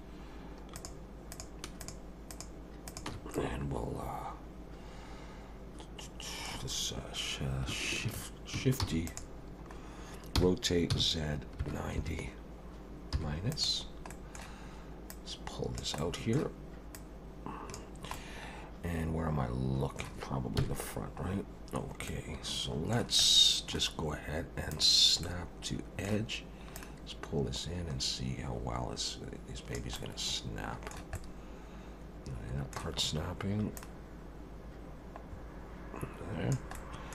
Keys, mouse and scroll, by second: 0.8 click, 1.3 click, 1.8 shift+click, 2.3 shift+click, 2.9 shift+click, 3.3 middle click, 8.8 shift+d, 9.4-10.3 scroll down 2, 10.3 r, 14.1 middle click, 15.1 click, 16.0 middle click, 16.9 click, 18.1 middle click, 20.6 KP_1, 21.3-22.1 scroll up 3, 22.1 middle click, 23.2 middle click, 24.7 click, 25.2 middle click, 26.7 click, 29.9 middle click, 31.1 middle click, 33.8 click, 36.7 middle click.